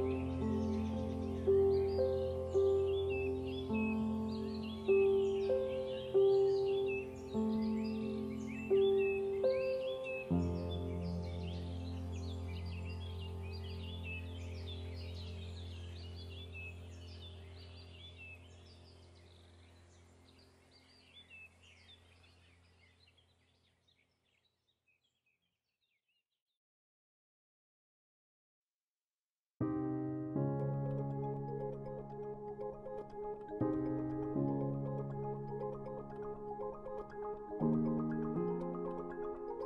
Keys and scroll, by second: 7.8 Down, 19.0 BackSpace.